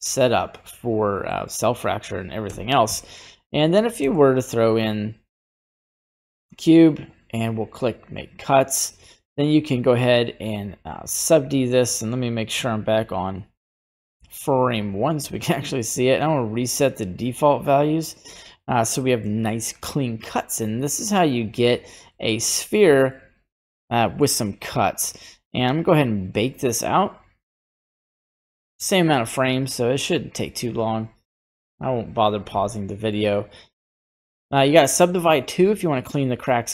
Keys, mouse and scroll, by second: 0.6-1.3 scroll up 4, 1.3 middle click, 1.6-2.4 scroll down 2, 2.5 a, 2.9 Delete, 4.0 shift+a, 6.5-7.8 scroll up 3, 7.8 click, 9.8 click, 11.3 right click, 12.6-14.0 drag, 14.5 scroll up 2, 15.2 scroll up 1, 15.4 shift+middle click, 16.3 click, 17.6 click, 18.4 middle click, 19.0 scroll down 1, 19.0 middle click, 19.2 scroll up 1, 21.0 click, 21.4 click, 22.0 scroll down 1, 22.1 middle click, 22.3-23.0 scroll up 1, 23.0 scroll down 1, 23.1-24.2 middle drag, 24.2 scroll up 1, 24.9-25.7 scroll down 3, 25.7-36.1 drag.